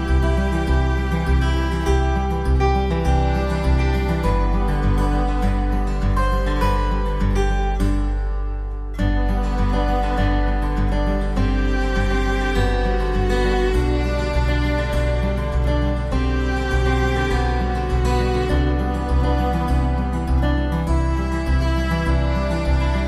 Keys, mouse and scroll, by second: 15.4 s, 18.5 middle click.